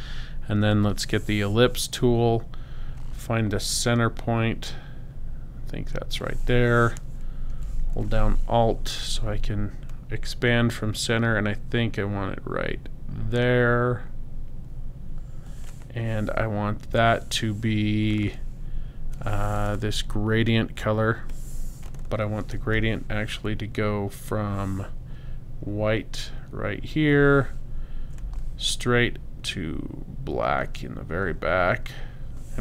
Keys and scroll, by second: 0.7 l, 16.8 i, 22.7 g.